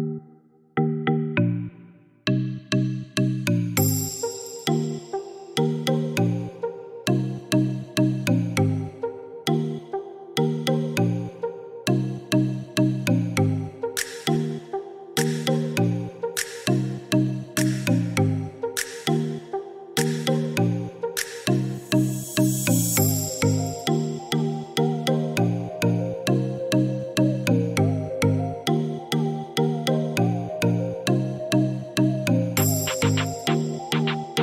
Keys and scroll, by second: 1.8 Escape, 11.3-12.7 typing, 12.8 Return, 22.4 6, 22.6 Return, 30.7 1, 32.1-33.0 typing.